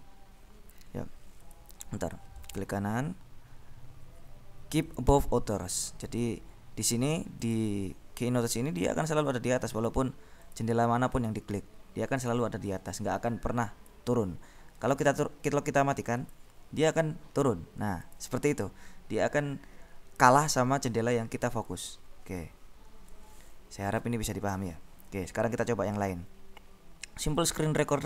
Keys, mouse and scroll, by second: 1.7 click, 2.6 right click, 5.1 click, 6.1 right click, 7.6 click, 11.0 click, 12.3 click, 13.0-14.4 drag, 15.0-16.3 right drag, 16.3 click, 18.1 click, 21.9 click, 23.5-25.2 drag, 27.6 click.